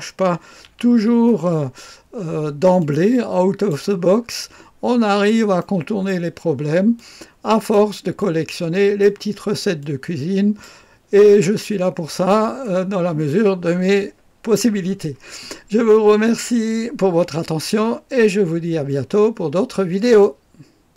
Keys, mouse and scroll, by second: 0.6 a, 0.7 c, 2.7 click, 4.1-4.7 scroll up 1, 4.7-5.5 scroll down 1, 5.5-6.5 right drag, 6.5 middle click, 6.5 typing, 6.9 click, 8.1 click, 9.7-11.2 drag, 11.2-13.0 middle drag, 19.9-20.9 drag.